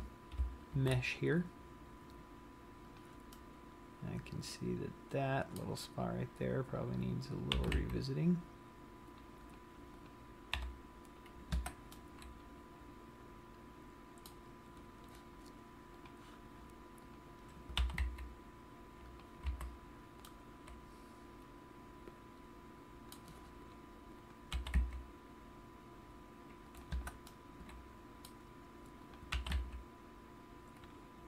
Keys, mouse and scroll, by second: 1.1 ctrl+r, 3.3 click, 3.6 middle click, 3.6 scroll up 1, 7.3 click, 7.8 g, 9.8 click, 10.3 click, 10.8 g, 12.2 middle click, 15.0-15.4 scroll up 6, 16.3 click, 17.3 click, 17.9 g, 19.4 click, 19.8 a, 19.9 scroll down 1, 20.5 middle click, 24.6 click, 24.9 g, 26.9 click, 27.1 Escape, 27.5 middle click, 29.2 click, 29.7 g, 31.0 click.